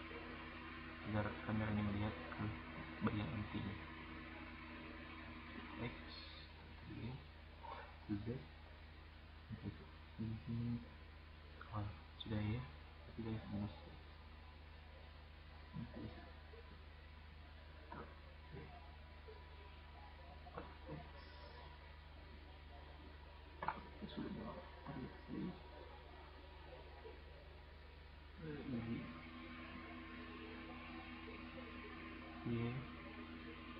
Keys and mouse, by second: 0.2 middle click, 0.8-1.1 right drag, 1.4 drag, 2.6-3.1 drag, 5.7 click, 13.7-15.4 drag, 17.3-18.0 drag, 24.8 click, 26.6-28.1 drag, 32.2-33.7 drag.